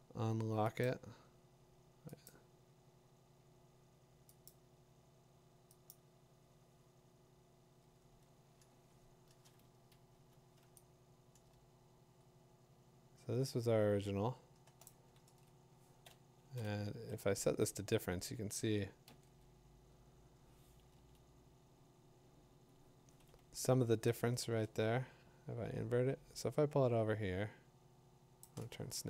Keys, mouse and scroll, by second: 0.8 click, 2.3 click, 4.5 click, 5.9 click, 8.7 v, 8.9 click, 10.1 Escape, 14.8-18.2 drag, 15.2 z, 19.1 Right, 19.1 ctrl+i, 20.9 Left, 23.3 v, 28.4 shift+click.